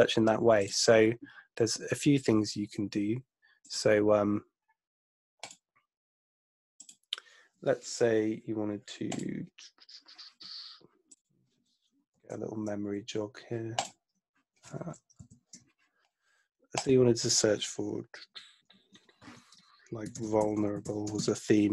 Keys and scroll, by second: 12.2 ctrl+Right, 15.2 ctrl+Left, 19.8-21.7 typing.